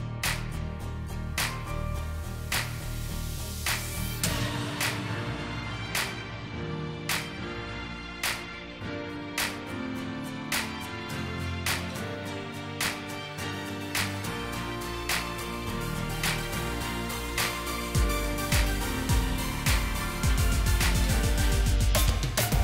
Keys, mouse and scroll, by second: 0.1-3.2 scroll up 1, 8.1 Right, 8.4 Right, 8.6 Right, 9.3 Right, 9.5 Right, 10.0 Right, 10.3 Right, 11.1 Right, 12.6 Right, 12.8 Right, 13.4 Right, 13.8 Right, 16.1 double click, 18.1 Left, 18.4 Left, 18.9 Left, 19.1 Left, 19.6 Left, 19.8 click, 20.1 click, 20.3 Left, 20.5 Left, 20.7 Left, 21.2 Left, 21.5 Left.